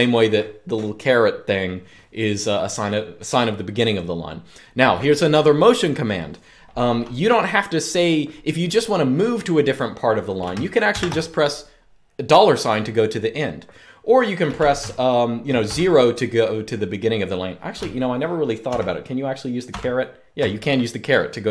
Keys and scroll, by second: 10.6 shift+4, 15.4 0, 18.4-19.4 typing.